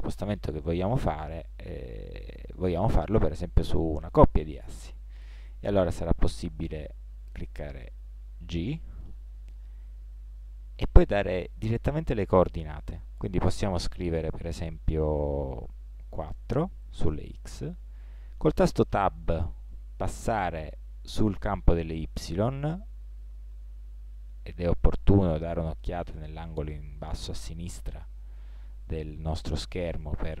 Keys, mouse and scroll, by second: 8.8 g.